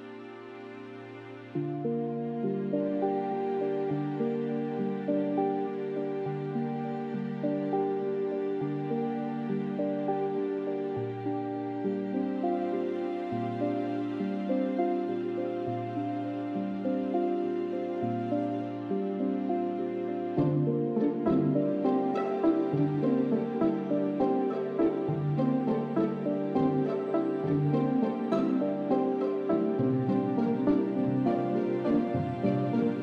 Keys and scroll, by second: 7.2 s, 14.4 shift+z, 15.6 a, 16.1 ctrl+KP_3, 18.2 e, 21.3 shift+z.